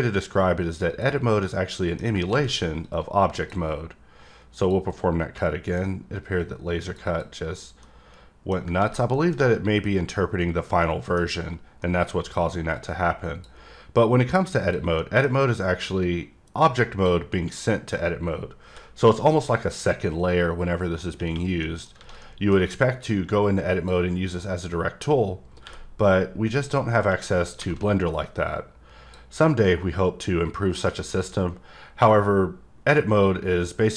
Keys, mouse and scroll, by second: 0.9 click, 1.4 middle click, 2.8 click, 4.6 click, 5.4 middle click, 6.4 click, 7.0 double click, 7.8 middle click, 9.2 middle click, 10.8 middle click, 12.1 middle click, 12.7 click, 14.6 click, 15.0 middle click, 16.0 click, 21.6 middle click, 22.2 middle click, 23.1 click, 27.9-28.5 scroll up 3, 28.5 click, 29.6-31.1 scroll down 3, 31.1 click, 31.6-33.2 scroll up 3, 33.2-33.9 drag.